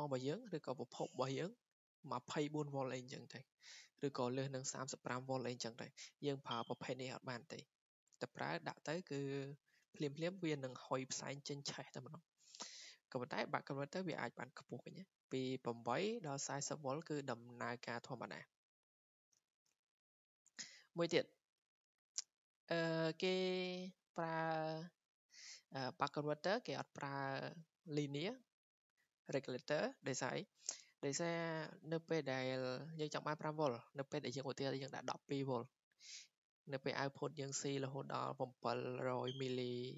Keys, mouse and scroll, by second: 5.5-10.5 drag, 13.0 click, 15.1 click, 15.5 click, 16.9 click, 21.3-25.1 drag.